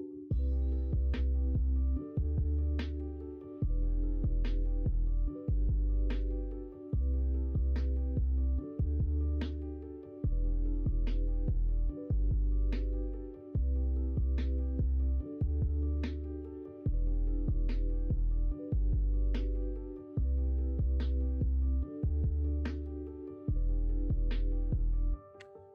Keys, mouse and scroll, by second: 0.5-2.8 middle drag, 4.0-4.5 middle drag, 4.8 shift+middle drag, 5.2-6.1 middle drag, 6.6 shift+middle drag, 7.1-9.3 middle drag, 9.9-12.0 middle drag, 12.8-13.5 middle drag, 14.1-15.9 middle drag, 16.4-17.1 middle drag, 17.5 middle click, 18.3 shift+middle drag, 19.2-19.9 middle drag, 23.0-23.8 middle drag, 24.5 middle click.